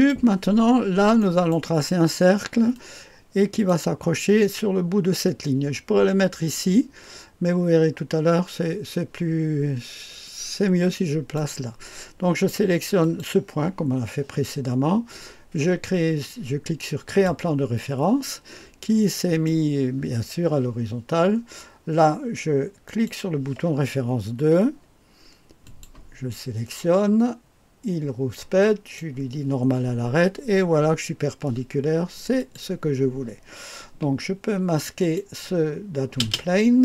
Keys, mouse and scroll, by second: 2.7 click, 10.2-11.4 drag, 13.0 click, 17.1 click, 19.3 click, 22.9 click, 25.6 click, 28.6 click, 32.3 click, 34.9 click.